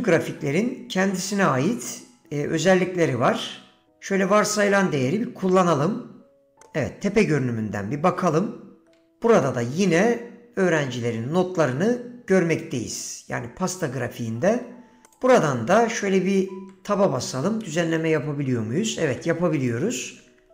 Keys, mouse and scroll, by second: 6.7 middle click, 8.2 KP_7, 16.7 Tab, 19.1-20.5 typing.